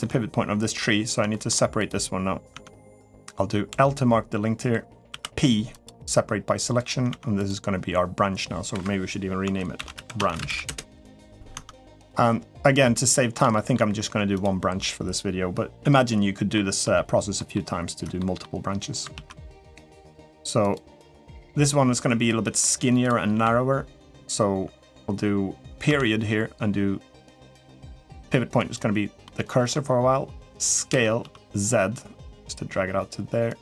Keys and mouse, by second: 1.1 shift+middle click, 1.5 click, 2.3 Tab, 2.7 click, 3.5 l, 4.9 p, 6.9 Tab, 7.2 click, 8.5 F2, 11.3 Tab, 12.7 middle click, 13.3 shift+middle click, 16.3 middle click, 17.1 middle click, 17.9 middle click, 18.9 alt+z, 19.3 middle click, 20.5-22.0 drag, 22.2 middle click, 23.1 a, 25.6 ., 29.0 middle click, 30.7 s.